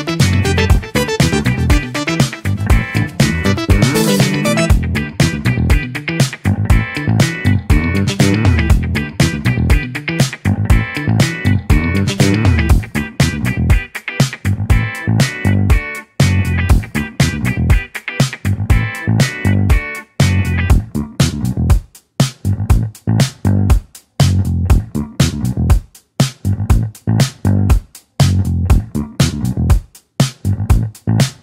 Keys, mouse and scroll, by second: 1.6-3.3 scroll up 2, 4.5 ctrl+alt+KP_0, 6.3 click, 9.9-11.5 middle drag, 11.5 KP_0, 12.7-17.4 drag, 17.4-19.2 middle drag, 19.2 scroll up 1, 19.3-20.2 shift+middle drag, 20.2-21.0 scroll up 3, 21.0-25.9 middle drag, 25.9-26.6 scroll down 1, 26.6 scroll down 1, 26.7-27.6 scroll up 1, 27.6-28.7 scroll up 1, 28.7-31.4 scroll up 1.